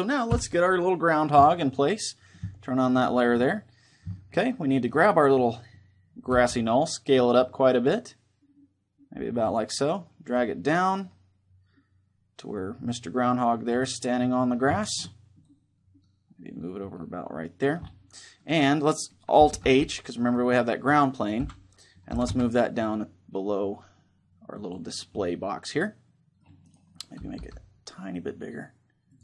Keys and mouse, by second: 0.0 Escape, 2.6-4.4 drag, 4.4 middle click, 4.7-6.4 right drag, 6.1 s, 9.3-11.8 drag, 13.7-16.2 middle drag, 15.2-16.8 drag, 18.2-20.0 middle drag, 19.4 alt+h, 20.0-21.8 right drag, 21.1 KP_1, 21.8 g, 24.4-26.4 drag, 24.8-26.4 middle drag, 26.4-28.2 right drag, 27.2 s, 28.9-29.2 drag.